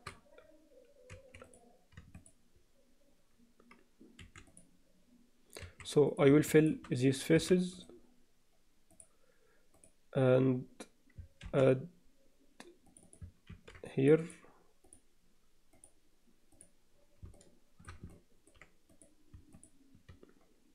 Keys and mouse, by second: 1.2 1, 1.4 click, 4.6 click, 4.6 3, 5.6 1, 6.6 shift+click, 7.4 f, 7.8-9.0 right drag, 9.8 click, 11.4 ctrl+r, 13.0 click, 13.5 ctrl+r, 14.2 click, 14.8 click, 15.7 click, 16.5 click, 17.4 alt+shift+middle click, 18.2 ctrl+alt+middle click, 19.0 click.